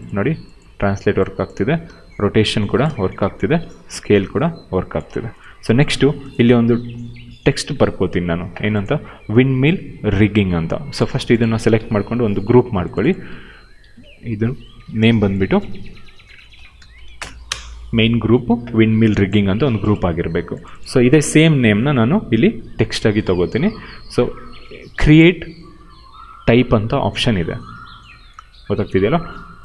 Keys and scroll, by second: 1.5 ctrl+z, 1.8 e, 2.8 ctrl+z, 3.1 r, 5.0 ctrl+z, 12.2 ctrl+g, 13.7 ctrl+v, 15.8-17.6 typing, 21.0 ctrl+c.